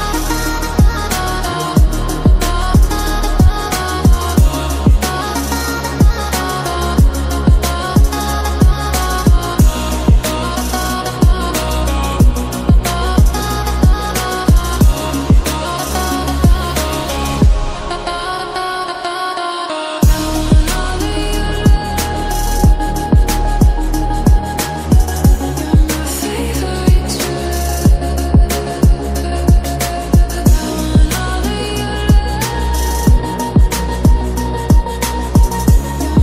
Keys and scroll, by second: 4.7 ctrl+t, 9.6-10.5 typing, 11.9 typing, 15.8 ctrl+z, 15.9-16.4 ctrl+z, 24.8 typing, 27.9 typing, 30.5 ctrl+t, 30.9 ctrl+t.